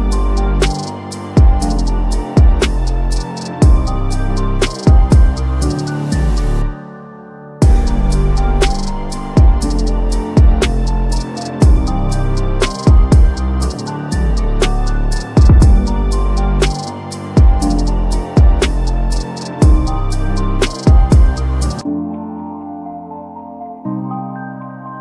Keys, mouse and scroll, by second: 0.5-1.0 drag, 3.8 click, 4.8 ctrl+d, 5.8 click, 9.8-12.0 drag, 13.8 s, 14.9 click, 15.7-16.4 typing, 16.8 click, 19.4 click, 19.6-20.6 typing, 20.4-22.4 drag, 23.4 ctrl+z, 24.2 click.